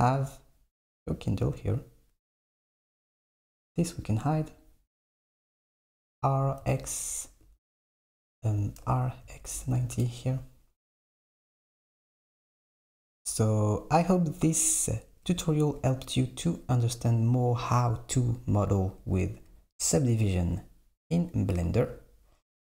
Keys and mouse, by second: 3.1 click, 4.1 click, 4.6 click, 5.3 click, 6.2 r, 8.9 r, 12.3 Tab, 12.7 Tab.